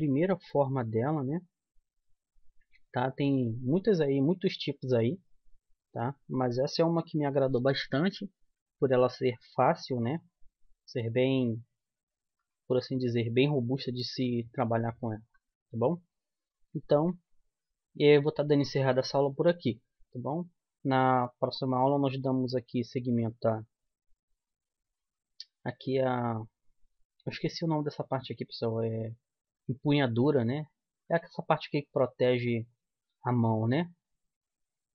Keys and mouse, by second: 0.6 middle click, 0.8-9.9 drag.